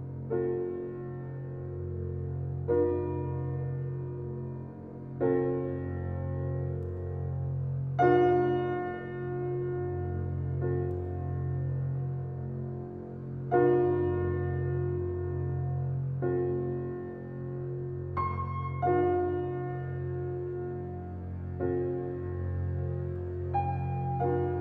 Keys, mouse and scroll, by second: 0.8 g, 3.9 middle drag, 5.3 middle drag, 6.9-7.4 middle drag, 9.4-12.4 middle drag, 19.0 s, 19.6-24.6 alt+middle drag.